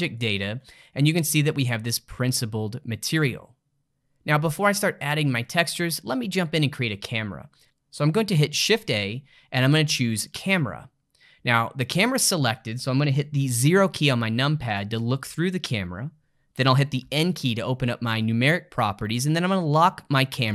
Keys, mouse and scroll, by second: 0.8-3.8 middle drag, 7.6 shift+s, 8.6 shift+a, 13.7 KP_0, 17.0 n.